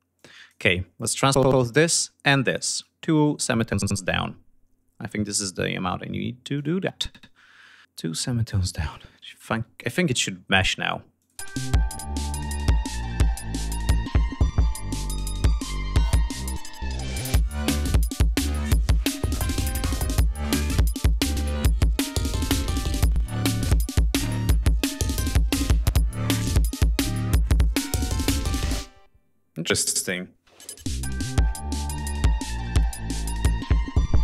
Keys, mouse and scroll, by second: 0.3 scroll down 1, 1.3 ctrl+click, 1.6 ctrl+click, 2.1 ctrl+right click, 5.9 click, 7.6-8.1 scroll down 4, 8.5 click, 9.6 click, 11.0-15.7 drag, 27.2 ctrl+scroll up 2, 27.7 ctrl+scroll down 2, 28.6 space, 29.8 click, 30.1 space, 32.2 scroll down 2, 33.2 scroll down 2, 33.6 ctrl+scroll up 2.